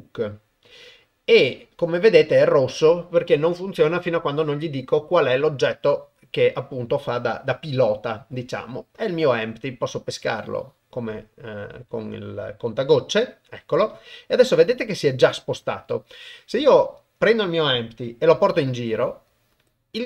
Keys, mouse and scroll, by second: 18.4 g.